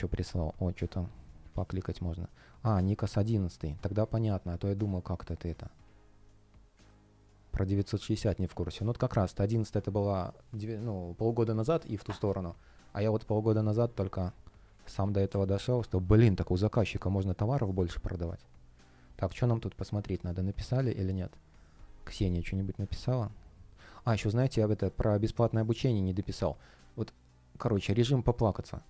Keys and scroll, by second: 1.4 super+c, 15.2 Return.